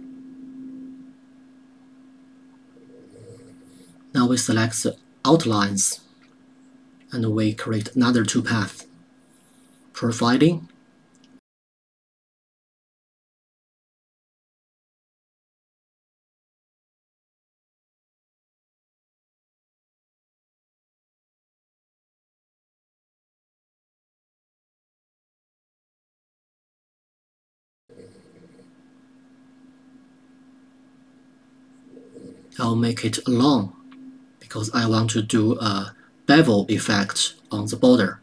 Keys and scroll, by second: 18.7 KP_0, 18.8 KP_Decimal, 21.5 KP_2.